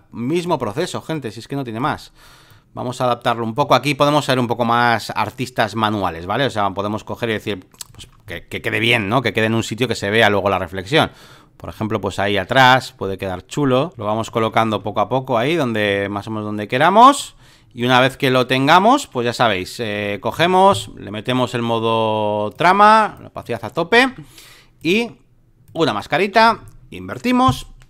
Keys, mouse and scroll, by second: 1.1 ctrl+click, 2.5-3.6 ctrl+drag, 4.0-8.6 drag, 9.1-11.7 ctrl+drag, 12.3 ctrl+click, 13.9 Up, 16.2 ctrl+click, 17.8 ctrl+click, 19.8 Up, 20.3 Return, 21.3-24.1 drag, 24.1 v, 24.8-26.6 drag, 27.3 ctrl+i.